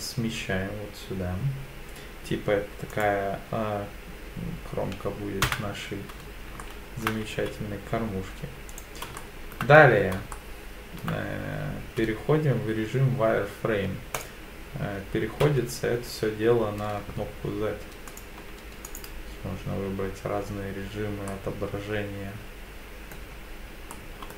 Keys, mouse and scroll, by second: 2.9 click, 5.5 KP_1, 6.6 shift+middle click, 7.3 z, 9.2 shift+middle click, 9.9-10.3 scroll down 3, 10.3 shift+middle click, 11.8 z, 15.4 z, 20.8 click, 21.3-23.2 middle drag, 23.4-23.7 scroll down 2, 23.9 shift+middle click.